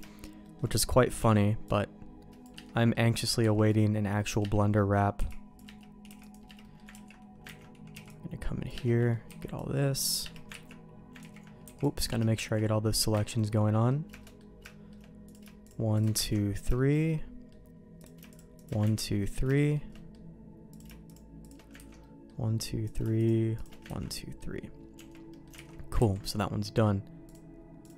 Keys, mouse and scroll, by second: 0.0 shift+middle click, 0.4 shift+middle click, 1.2 c, 2.7 middle click, 3.4 c, 4.5 middle click, 5.1 c, 6.0 c, 6.6 middle click, 6.9 ctrl+q, 7.6 ctrl+x, 7.9 c, 8.8 middle click, 9.2 c, 10.5 ctrl+q, 11.2 ctrl+z, 11.6 c, 12.5 ctrl+q, 13.2 ctrl+x, 13.4 click, 13.7 middle click, 14.2 shift+middle click, 14.6 shift+middle click, 15.2 click, 15.6 shift+click, 16.2 ctrl+x, 16.7 middle click, 17.0 middle click, 18.0 click, 18.3 click, 18.9 ctrl+x, 19.2 middle click, 19.5 shift+middle click, 19.9 middle click, 20.7 click, 21.0 shift+click, 21.8 ctrl+x, 22.0 middle click, 22.8 click, 23.2 shift+click, 24.0 ctrl+x, 24.0 middle click, 24.9 Tab, 25.3 middle click, 25.5 alt+a, 26.0 ctrl+s, 27.2 click.